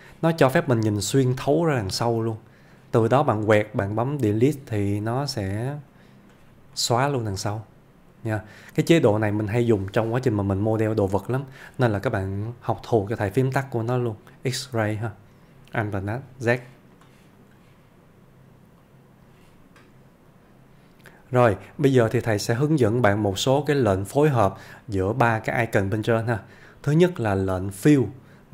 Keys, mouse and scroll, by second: 0.5 middle click, 1.0-1.7 click, 5.2 x, 6.0 click, 6.8-7.4 middle click, 8.6 alt+z, 9.8 alt+z, 11.0 ctrl+z, 14.7 ctrl+click, 15.2-15.8 scroll down 1, 15.8 ctrl+middle click, 16.5-17.2 ctrl+click, 22.6-24.2 ctrl+click, 26.9 ctrl+click.